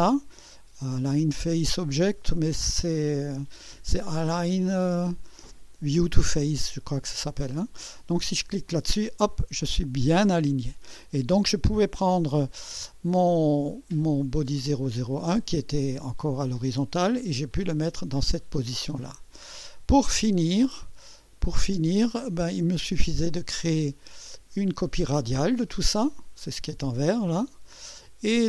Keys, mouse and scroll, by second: 8.5 click, 20.7 scroll down 2, 21.7 click, 22.5 space, 23.0 click, 24.2-26.8 drag, 27.3 scroll down 2, 27.9 click.